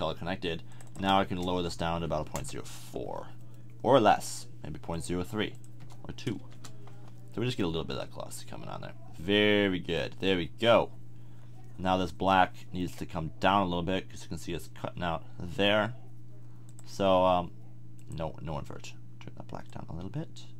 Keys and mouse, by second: 4.9-7.4 drag, 12.5-15.0 middle drag, 16.9 click.